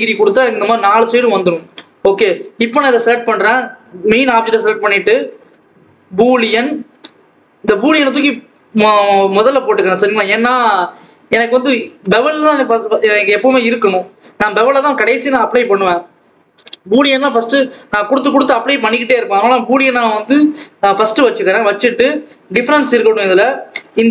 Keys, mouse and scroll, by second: 0.1 ctrl+s, 0.3 Tab, 0.8 alt+a, 0.9 click, 1.7 scroll up 1, 1.9 ctrl+s, 2.1 click, 4.8 click, 6.5-8.9 drag, 10.4-13.4 scroll up 1, 16.3 click, 23.0 click.